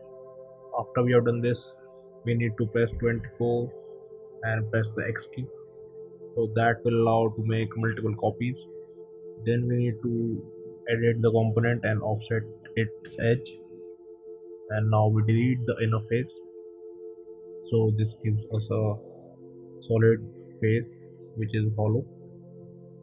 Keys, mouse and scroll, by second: 5.6 click, 5.7 click, 7.9 click, 9.7 click, 11.1 click, 13.7 click, 14.8 click, 15.7 Delete, 18.1 click, 19.5 click, 20.0 click, 20.4 click, 20.8 click, 21.0 click, 21.9 a.